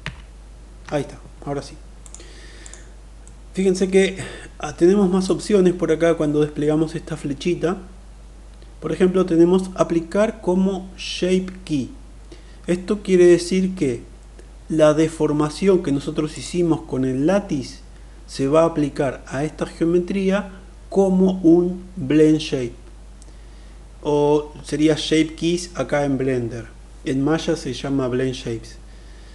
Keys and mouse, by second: 1.8 click, 2.2 click, 3.0 middle click, 5.0-14.3 drag, 16.0 click.